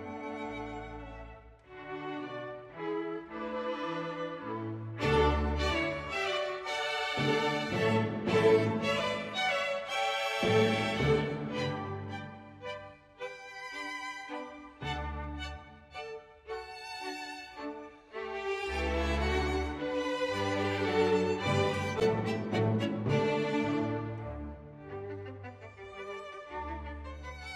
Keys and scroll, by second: 0.0 Page_Up, 0.1 Page_Down, 0.6 Page_Down, 0.7 Page_Down, 1.0 Page_Down, 1.1 Page_Down, 1.3 space, 1.6 Page_Down, 1.8 Page_Down, 2.0 Page_Down, 2.3 Page_Down, 2.4 Page_Down, 2.7 space, 3.0 Page_Down, 3.3 Page_Down, 4.1 Page_Down, 4.3 Page_Up, 4.4 Page_Down, 4.8 Page_Up, 6.0 Page_Up, 6.1 Page_Down, 6.7 Page_Up, 6.9 ctrl+z, 7.5 ctrl+z, 8.2 Page_Up, 8.2 Page_Down, 8.3 Page_Down, 9.1 Page_Down, 9.4 Page_Down, 9.6 Page_Down, 9.7 Page_Down, 10.0 Page_Up, 10.3 Page_Down, 10.4 Page_Up, 10.7 Page_Down, 10.9 Page_Down, 11.1 Page_Down, 11.3 Page_Down, 11.6 Page_Down, 11.7 Page_Down, 11.9 Page_Up, 12.4 Page_Down, 13.3 Page_Down, 13.4 Page_Down, 13.5 Page_Down, 14.1 space, 14.3 Page_Down, 14.4 Page_Down, 14.9 Page_Down, 15.0 Page_Up, 15.1 Page_Down, 15.2 Page_Down, 15.4 Page_Down, 15.6 Page_Down, 15.9 space, 16.1 Page_Down, 16.3 Page_Down, 16.5 Page_Down, 16.7 Page_Down, 16.8 Page_Down, 17.0 Page_Down, 17.2 Page_Down, 17.5 Page_Down, 17.7 space, 18.5 Page_Down, 18.8 Page_Down, 19.0 Page_Down, 19.2 space, 19.4 End, 19.9 End, 20.1 Page_Down, 20.2 Page_Up, 20.5 Page_Down, 20.8 ctrl+z, 21.9 Page_Up, 22.1 Page_Down, 22.6 Page_Down, 23.0 Page_Down, 23.6 Page_Down, 24.4 space, 26.3 Page_Down, 26.4 Page_Up, 26.6 Page_Down, 27.2 space.